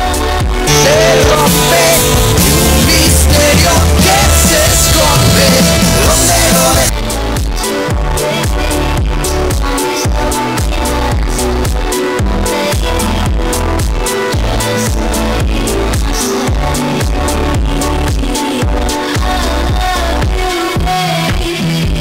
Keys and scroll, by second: 6.8 Page_Down.